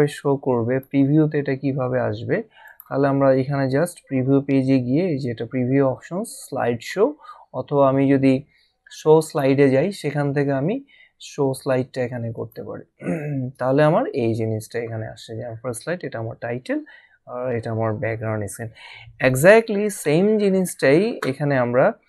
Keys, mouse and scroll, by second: 2.6 click, 9.2 click, 12.4 click.